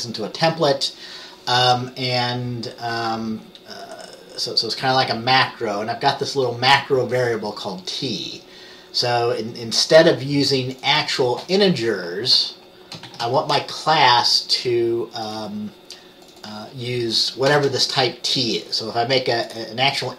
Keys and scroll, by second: 13.2 Return, 17.7 t.